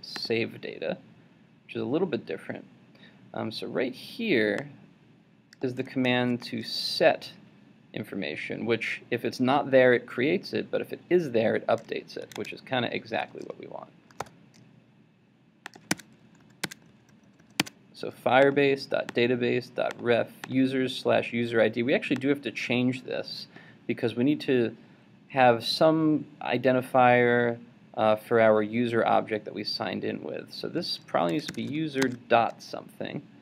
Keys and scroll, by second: 6.1 super+c, 12.4 super+Tab, 14.2 super+v, 32.0 super+Tab.